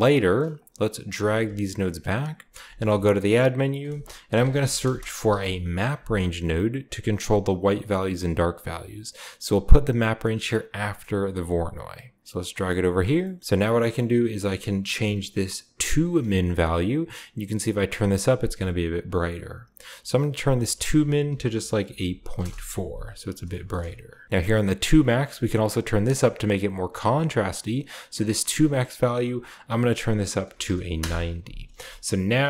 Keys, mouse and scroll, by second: 0.1-0.5 scroll down 1, 0.5 click, 1.2 g, 1.8 click, 2.6-3.1 typing, 3.1-4.5 shift+drag, 4.3-5.3 typing, 7.7 click, 10.5 click, 10.9 click, 11.5 click, 11.8 click, 12.2 click, 12.6 middle click, 12.7-13.6 scroll up 3, 13.4 click, 13.6 scroll down 1, 13.7-16.2 middle drag, 14.8 scroll up 2, 16.3-18.4 shift+drag, 20.5 click, 21.9-22.3 typing, 22.4 Return, 23.1 scroll down 2, 23.4 shift+middle click, 24.9-27.7 drag, 28.7-30.4 drag, 30.4 typing, 30.9 Return, 31.8-32.4 shift+middle drag.